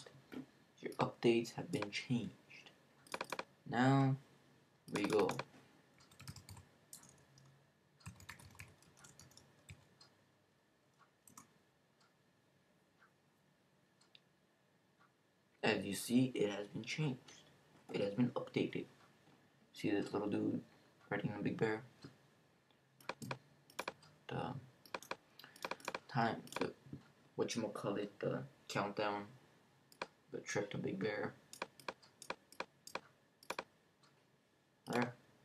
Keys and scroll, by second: 5.7-11.8 typing.